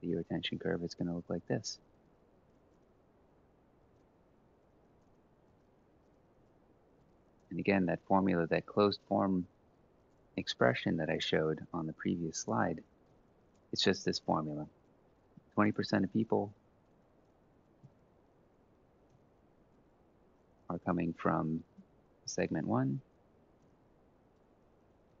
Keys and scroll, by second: 0.1 typing, 0.8 F4, 1.3-2.2 typing, 4.7 Return, 5.2 Up, 5.4 ctrl+c, 5.6 shift+Down, 5.8 shift+Down, 5.9 shift+Down, 6.1 shift+Down, 6.2 Return, 6.6 shift+Down, 6.9 ctrl+v, 12.8 typing, 17.5 F4, 18.6-19.3 typing, 23.3-25.2 typing.